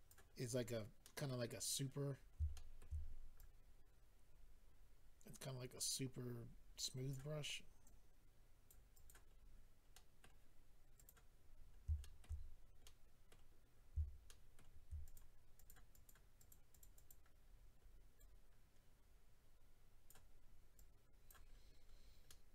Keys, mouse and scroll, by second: 0.3-1.0 scroll down 3, 1.0 middle click, 1.3-1.6 scroll down 1, 2.1-2.5 scroll up 2, 2.5 shift+middle click, 3.0-3.3 scroll up 2, 3.3 click, 7.3-8.3 scroll down 3, 7.8 click, 8.9 click, 9.1 click, 9.3-9.8 scroll down 1, 9.8 scroll down 2, 9.9 middle click, 10.9 click, 11.1 click, 12.0 shift+middle click, 12.4-12.8 scroll up 2, 12.8 middle click, 13.5-14.6 scroll up 2, 14.6 middle click, 15.0 click, 15.1 click, 15.5 click, 15.7 double click, 15.9 double click, 16.1 double click, 16.4 double click, 16.5 double click, 16.7 double click, 16.8 double click, 16.9 double click, 17.1 double click, 17.4-18.2 scroll up 5, 18.2 double click, 20.3-20.7 scroll down 2, 20.7 click, 21.5-22.3 scroll down 2, 22.3 middle click, 22.3-22.5 scroll down 3.